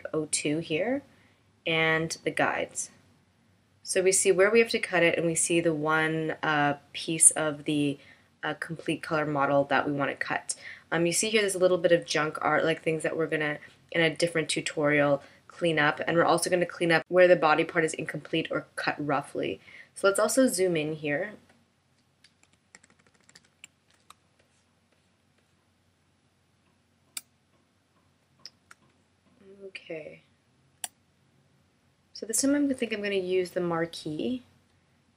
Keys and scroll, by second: 24.1 super+=, 25.3 space, 29.9 space.